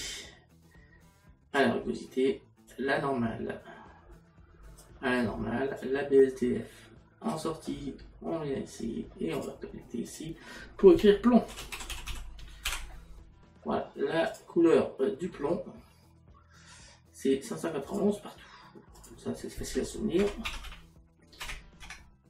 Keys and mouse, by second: 2.7 click, 5.8 click, 9.4 click, 17.9 click, 20.2 KP_Decimal.